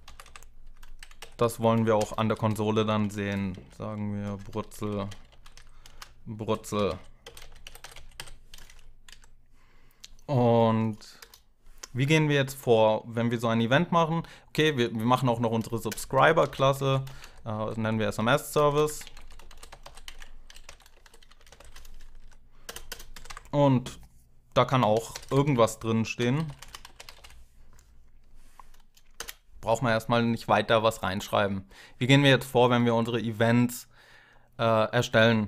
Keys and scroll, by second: 0.0-8.2 typing, 2.0 Left, 8.9 Down, 11.0 Return, 15.7 Return, 16.0-19.3 typing, 21.3 ctrl+alt+7, 21.3-22.6 typing, 21.3 ctrl+alt+0, 22.0 Left, 22.7 Return, 22.9 Up, 23.1 Tab, 24.5-27.4 typing, 29.0 Return.